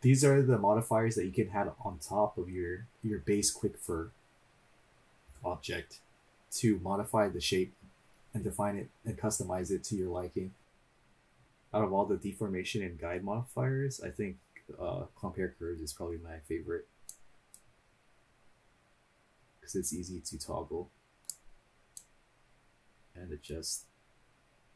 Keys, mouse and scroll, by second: 1.0-1.7 scroll down 2, 17.1-21.2 drag, 21.9-24.7 drag.